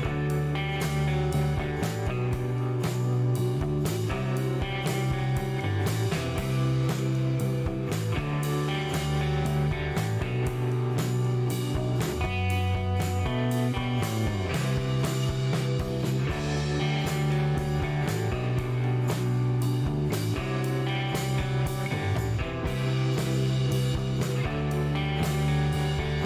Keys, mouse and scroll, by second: 2.2 scroll down 1, 2.4 middle click, 2.8-3.2 scroll up 1, 4.4 click, 5.2 click, 5.9 click, 6.8 click, 9.2 click, 10.1 scroll down 1, 10.7 middle click, 11.4 scroll up 2, 13.2-14.4 drag, 17.5 click, 20.0 scroll down 2, 20.4-21.5 middle drag, 22.8 click, 24.3 scroll up 2, 25.0 shift+right click, 26.1 shift+middle click.